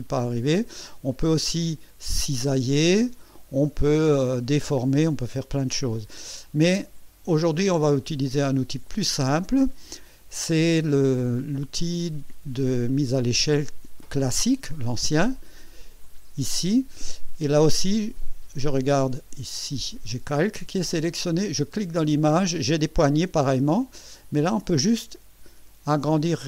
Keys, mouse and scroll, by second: 1.6-3.5 drag, 4.1-5.4 drag, 8.2 Escape, 16.0 click, 21.7 click, 23.5-26.4 drag.